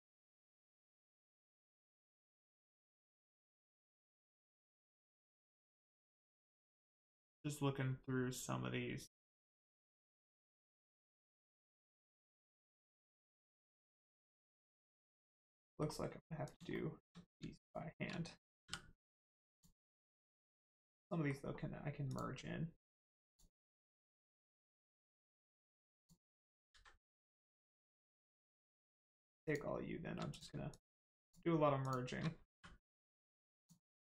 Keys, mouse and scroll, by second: 4.3 click, 14.3 middle click, 15.3 scroll up 1, 15.6 middle click, 16.4 click, 16.7 shift+middle click, 17.5 shift+click, 18.6 click, 19.5 click, 20.2 middle click, 21.5-21.9 scroll up 1, 22.1 click, 22.4-22.8 scroll up 1, 23.3 shift+click, 23.6 shift+click, 24.2 shift+click, 24.6 x, 25.9 click, 26.8 ctrl+z, 27.5 click, 29.1 shift+click, 29.4 shift+click, 30.3 click, 30.7 shift+click, 33.5 click.